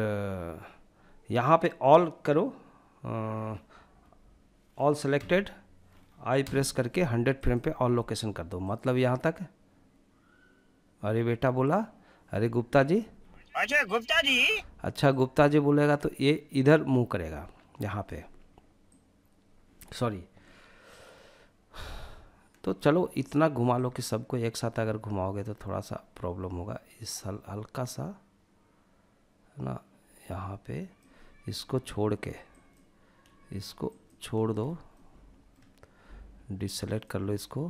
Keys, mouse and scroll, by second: 4.3 a, 5.5 i, 7.8-11.8 drag, 12.2 space, 13.5 space, 14.3-17.2 drag, 18.1 click, 22.8 click, 23.2 click, 31.6 ctrl+click, 33.0 ctrl+click, 33.7 scroll up 2, 34.0-34.7 shift+middle drag, 36.0 shift+click, 37.4-37.6 middle drag.